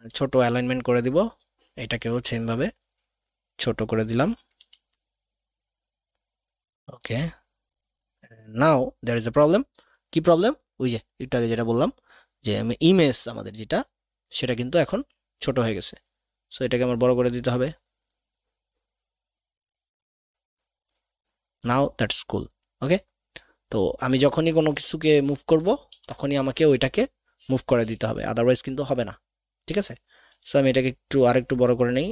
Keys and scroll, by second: 4.9 ctrl+z, 25.9 ctrl+KP_2.